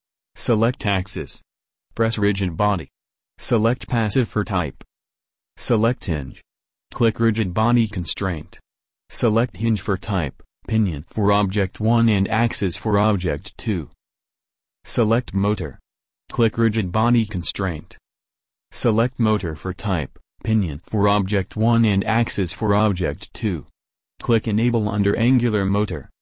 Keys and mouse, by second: 1.0 right click, 1.8 middle click, 6.5 right click, 7.5 middle click, 8.0-9.5 drag, 10.1-13.2 drag, 16.3 middle click, 26.0-26.2 middle drag.